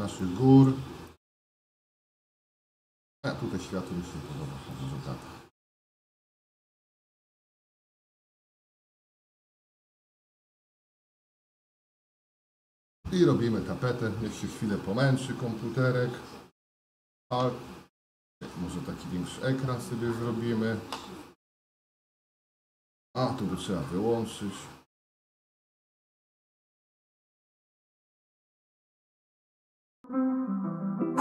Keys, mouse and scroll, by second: 0.2-1.8 shift+middle drag, 3.5 middle click, 4.7 shift+middle click, 5.6 middle click, 7.1 middle click, 8.2-9.2 shift+middle drag, 9.7 shift+middle click, 18.2 ctrl+alt+space.